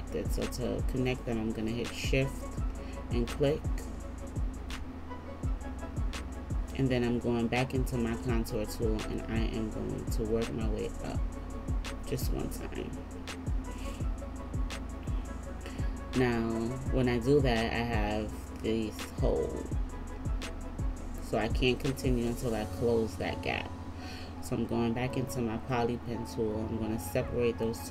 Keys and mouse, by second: 12.3-15.7 ctrl+middle drag.